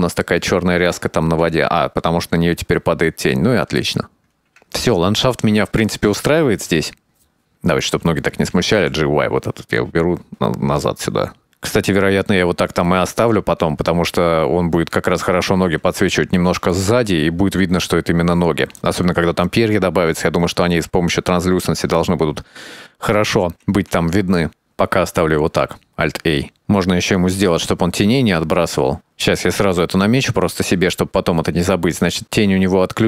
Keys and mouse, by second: 3.9 shift+middle click, 5.5 click, 7.3 right click, 7.9 g, 12.0-13.3 shift+middle drag, 15.6 g, 22.0 ctrl+s, 25.9 alt+a, 26.5-29.1 drag, 29.6 click, 30.2 click, 32.3 click.